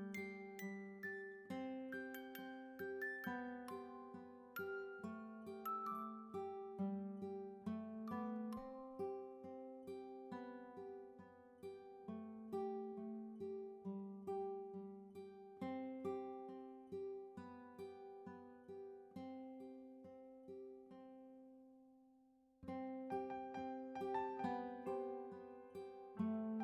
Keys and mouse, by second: 0.0-1.1 typing, 2.7 click, 4.0 <, 5.3 click, 6.4 click, 10.5 click, 12.3 click, 17.2 click, 20.5 click, 21.2 click, 23.1 ctrl+g.